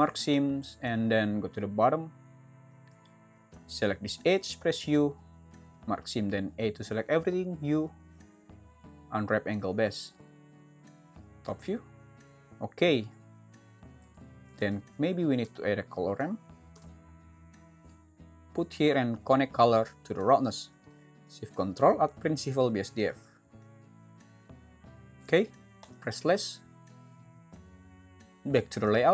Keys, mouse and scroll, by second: 12.2 Tab, 14.6 shift+a.